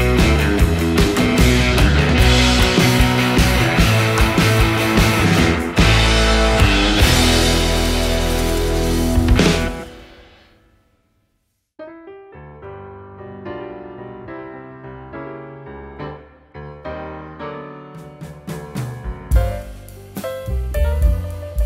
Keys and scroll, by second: 0.8 super+z, 3.8 super+z.